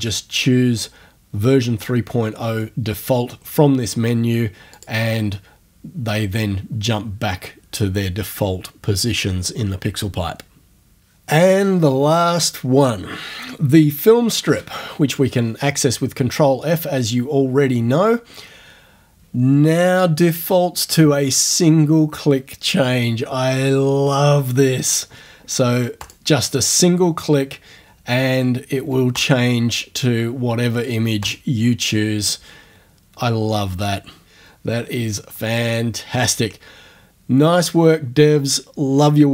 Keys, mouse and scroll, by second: 4.8 click, 14.5 ctrl+f, 26.0 click, 29.2 click, 31.3 click.